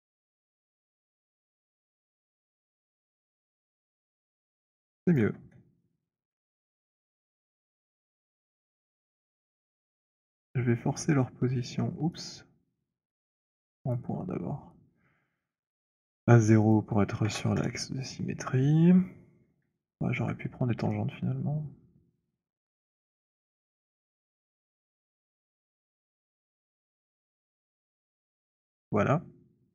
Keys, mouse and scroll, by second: 0.0-2.4 typing, 0.0 click, 2.2 click, 4.8 alt+click, 5.3 w, 6.5 alt+middle click, 9.0 right click, 10.0 click, 13.0 right click, 13.8 click, 15.3 click, 16.6 click, 17.3 0, 17.6 Return, 19.1 middle click, 20.2 alt+middle click, 21.6 alt+middle click, 22.3 alt+middle click, 22.6 alt+middle click, 23.0 shift+click, 24.3 click, 24.7 shift+right click, 25.4 click, 26.9 click, 27.4 typing, 27.7 Return.